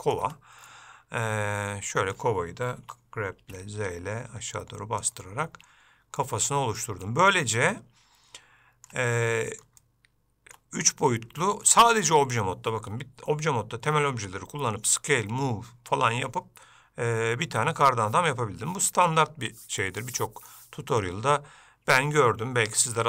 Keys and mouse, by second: 0.9 Tab, 0.9-2.3 middle drag, 6.4 middle click, 7.2 middle click, 7.9-9.1 ctrl+middle drag, 9.4 middle click, 10.0 shift+middle click, 11.6 shift+middle click.